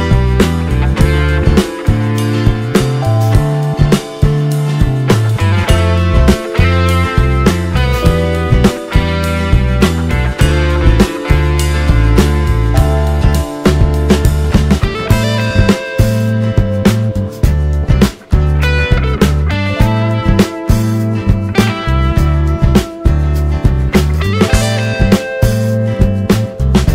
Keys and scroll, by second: 12.3 ctrl+t, 19.4 t.